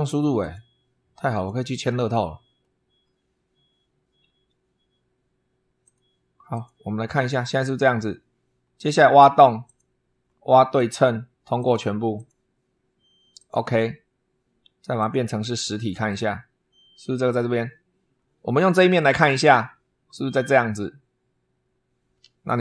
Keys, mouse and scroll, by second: 0.2 click, 1.1 click, 1.7 middle click, 5.6 click, 6.3 click, 9.4 click, 10.6 click, 11.4 click, 12.0 click, 13.2 click, 14.8 click, 15.3 click, 18.7 click.